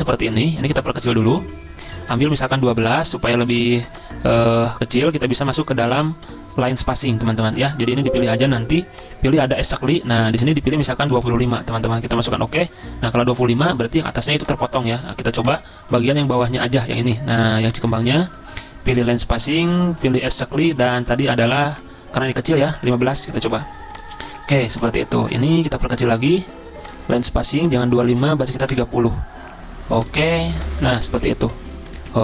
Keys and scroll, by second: 10.9-11.7 typing, 15.0 ctrl+z, 22.6-23.4 typing, 26.2-26.9 typing, 28.4-29.2 typing.